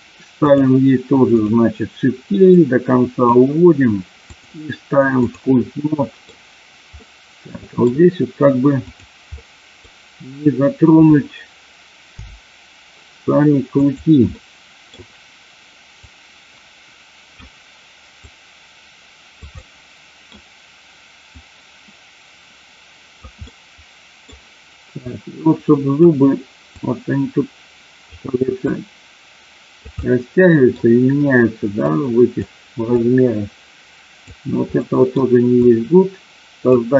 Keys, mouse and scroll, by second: 0.4 click, 1.2 click, 2.5 click, 4.2-5.5 drag, 5.7 middle click, 6.9 middle click, 9.3 middle click, 12.0 f, 14.3 middle click, 16.0-17.4 drag, 18.3-19.4 drag, 19.5 middle click, 21.4-23.1 drag, 23.3 middle click, 25.0-26.0 drag, 26.8-28.1 drag, 28.5-29.9 drag, 30.0 middle click, 31.8 click, 32.9-34.3 drag, 34.8 middle click, 35.5-36.7 drag.